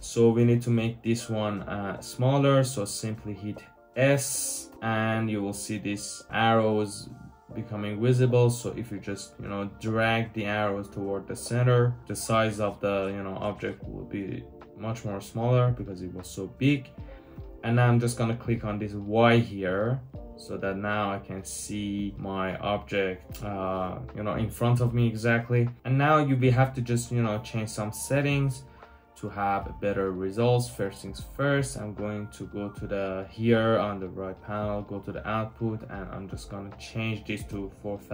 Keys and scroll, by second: 1.1 typing, 4.6 typing, 5.9 Return, 5.9-7.7 typing, 9.6 typing, 25.8 typing, 37.3-38.1 typing.